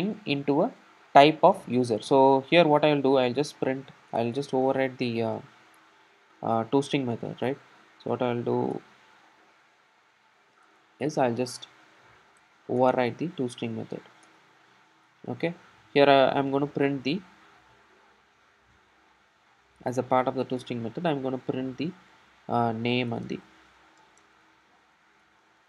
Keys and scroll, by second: 9.2 super+o, 11.2 super+o, 12.1 super+n.